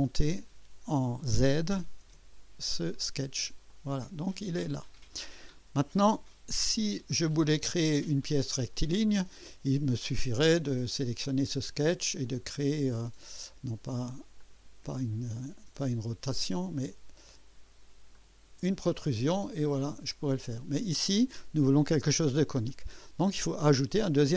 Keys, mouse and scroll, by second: 0.0 click, 1.4-2.2 typing, 2.0 KP_Enter, 3.7-6.0 drag, 6.8 typing, 7.4-9.5 drag, 8.8-9.5 right drag, 12.2 click, 14.4 click, 16.2 click, 18.1 click, 20.5 click, 22.7-23.9 drag, 23.7 typing.